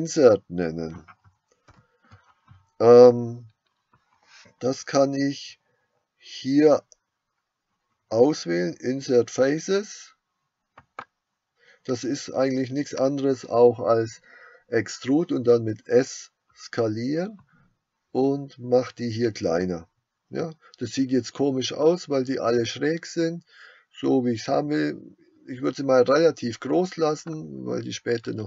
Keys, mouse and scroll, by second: 1.7 ctrl+z, 10.9 click, 18.1-27.3 drag.